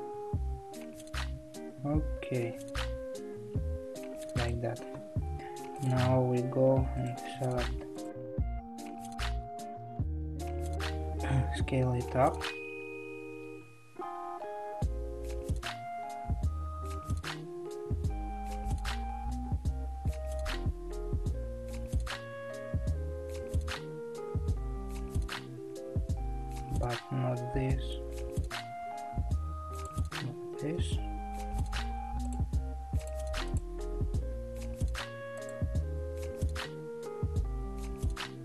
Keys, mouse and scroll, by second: 5.8 click, 9.1 shift+click, 9.9 shift+click, 10.4 shift+click, 11.4 s, 29.7 click, 31.6 shift+click, 32.3 shift+click, 33.1 shift+click, 33.7 shift+click, 34.2 s.